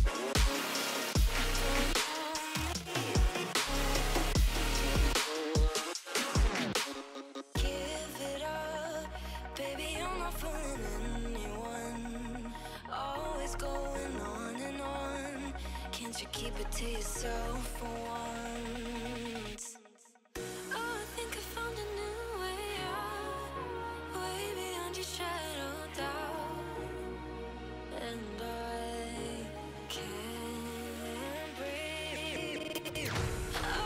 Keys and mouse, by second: 2.5 click, 5.0 click, 9.7 click, 10.9 click, 11.1 click, 12.6 space, 12.6 click, 14.3 click, 16.2 click, 16.9 click, 18.0 click, 23.6 click, 26.5 click, 27.9 click, 29.9 click, 30.3 ctrl+shift+[, 30.5 ctrl+], 31.8 click.